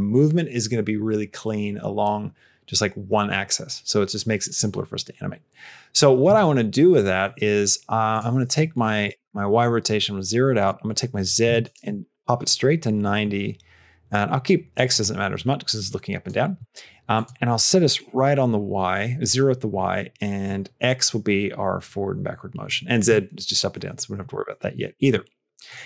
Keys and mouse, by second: 8.0-9.7 drag, 10.5-12.6 drag, 14.8-16.2 drag, 17.0-18.7 drag, 20.3-22.5 drag, 25.6 click.